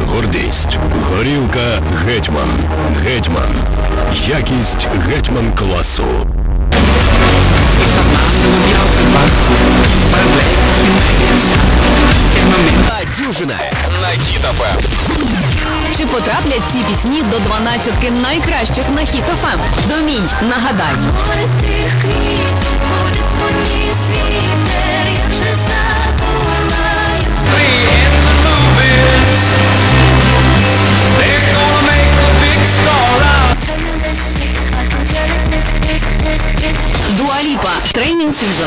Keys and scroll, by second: 12.8 Page_Down, 33.8 Page_Down.